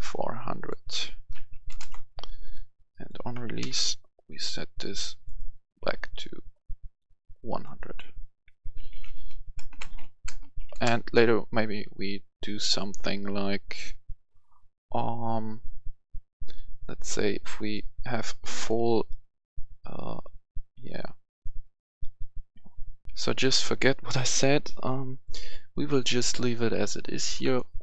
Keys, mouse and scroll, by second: 1.3-1.6 typing, 1.7 Return, 2.4 click, 3.3 ctrl+c, 3.5 ctrl+v, 4.2-7.5 drag, 8.7-10.5 typing, 10.7 Return, 12.0-22.9 drag, 23.0 F10, 25.9 right click, 27.3 click.